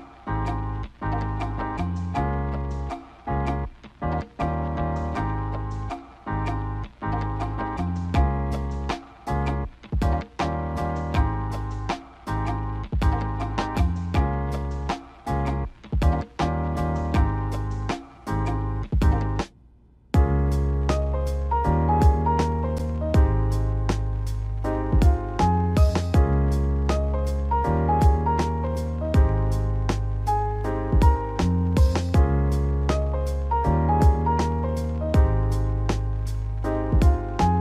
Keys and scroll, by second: 21.0 -, 27.8 space.